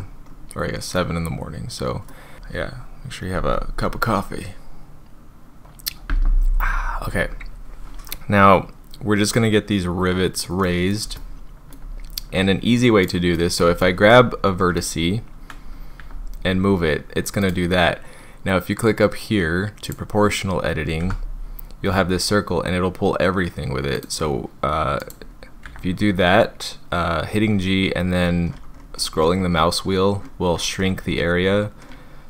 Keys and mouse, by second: 0.0 Tab, 1.0-2.1 middle drag, 10.8 middle click, 11.2 shift+middle click, 13.0 click, 13.3 middle click, 13.8 shift+middle click, 16.0 g, 17.4 click, 19.8 click, 21.0 g, 23.9 click, 25.6 g.